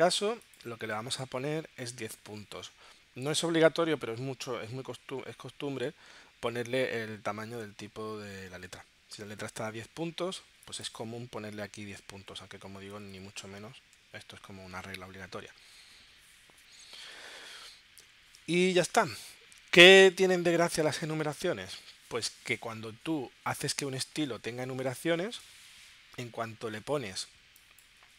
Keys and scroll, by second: 11.5 2, 12.2 BackSpace, 12.9 1, 13.8 Tab.